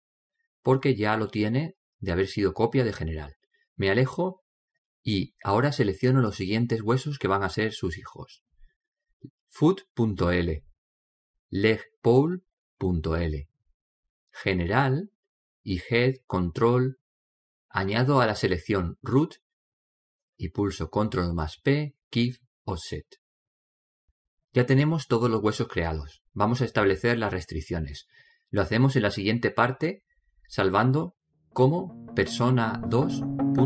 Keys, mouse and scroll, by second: 0.5-2.6 middle drag, 2.9-3.4 scroll up 1, 3.4-5.3 middle drag, 11.2-15.0 right drag, 16.1-19.1 right drag, 19.9 right click, 21.7 ctrl+p, 24.5-26.6 middle drag, 32.0 click.